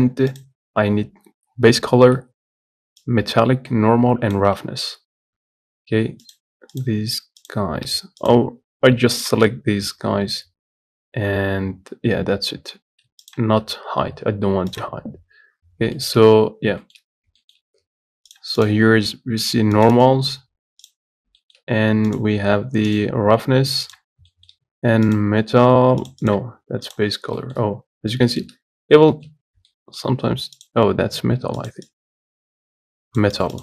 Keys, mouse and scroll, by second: 18.6 click, 21.1-33.6 drag.